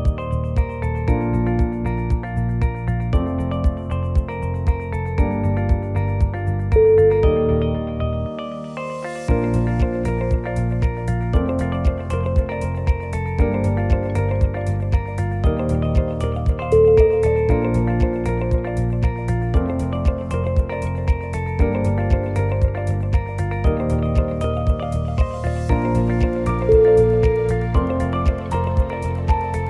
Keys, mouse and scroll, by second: 0.3 scroll up 2, 0.5 shift+middle click, 1.3 click, 1.7 shift+middle click, 2.1 scroll up 2, 2.4 middle click, 3.1 scroll up 1, 4.1 2, 4.5 alt+click, 4.7 shift+g, 5.6 s, 7.3 shift+z, 8.2 g, 9.6 g, 13.5 s, 14.8 middle click, 16.5 click, 17.0 alt+click, 17.8-19.8 shift+click, 20.4 g, 24.3 alt+click, 24.8 g, 27.5 middle click, 28.7 e, 29.4 s.